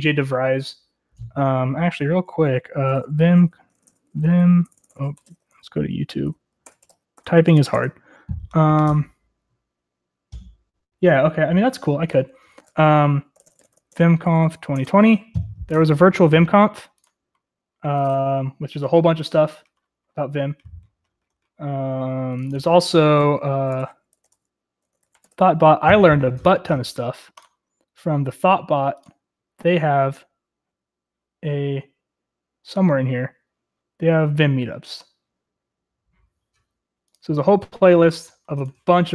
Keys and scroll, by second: 2.4 ctrl+t, 2.6-8.2 typing, 4.7 ctrl+BackSpace, 13.2-15.4 typing, 17.3 typing, 23.6-25.8 typing.